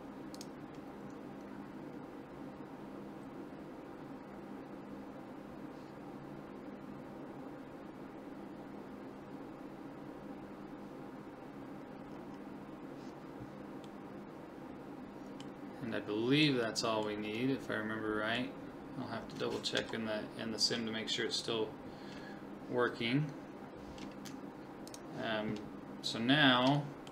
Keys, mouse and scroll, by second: 4.5-6.3 middle drag, 12.1-15.9 middle drag, 16.7-19.4 middle drag, 19.8 KP_1, 24.9 click, 26.2 middle click, 26.8-27.1 middle drag.